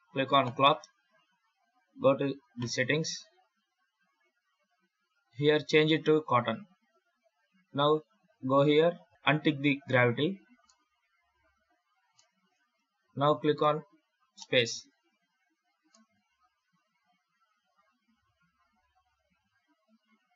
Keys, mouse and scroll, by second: 2.4 click, 3.6-4.3 scroll down 3, 4.3 scroll up 2, 5.2 click, 8.5 click, 9.8 click, 10.5 middle click, 12.0 shift+middle click, 14.2 space, 15.9 middle click.